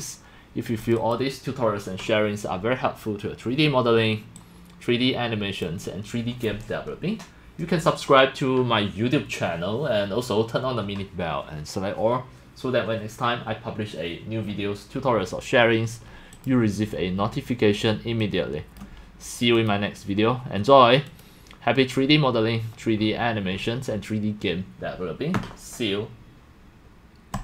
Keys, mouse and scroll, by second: 0.8 click, 1.0 click, 3.0 click, 3.6 click, 4.6-5.6 drag, 16.4 click, 18.2 click, 19.5 click, 21.1 click, 23.2 middle click, 23.9 middle click, 27.3 click.